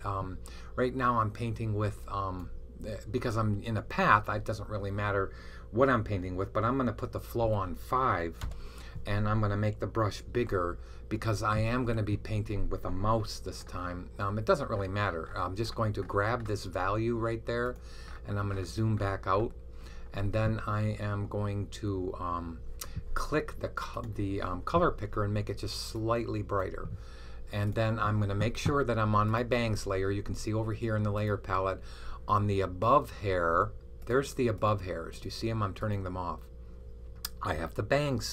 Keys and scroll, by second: 7.3 5, 10.3-11.7 typing.